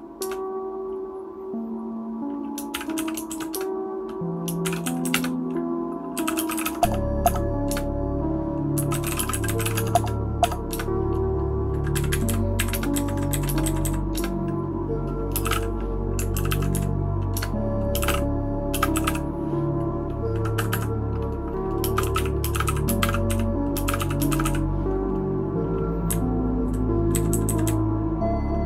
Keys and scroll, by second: 0.0-0.7 typing, 3.2-4.0 typing, 12.1 Down, 12.2 Down, 12.6 Up, 12.7 Return, 12.9 Down, 13.5 Return, 13.6 Down, 13.8 Down, 14.3 Return, 15.1-16.0 typing, 16.3 ctrl+w, 16.4 ctrl+w, 16.7 Down, 17.4 Return, 17.7-19.0 typing, 20.6 Escape, 20.7 Escape, 21.7-24.4 typing, 25.8-26.6 typing, 26.6 Up, 27.1 Down, 27.3 Down, 27.4 Down, 27.6-28.6 Down.